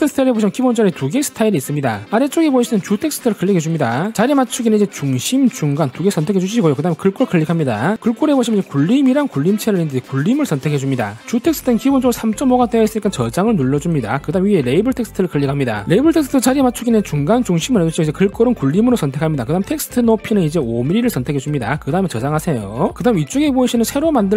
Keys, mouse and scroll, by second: 4.0 click, 4.1 click, 5.3 click, 6.0 click, 7.8 click, 14.2 click, 20.3 click, 20.8 click, 21.7 click.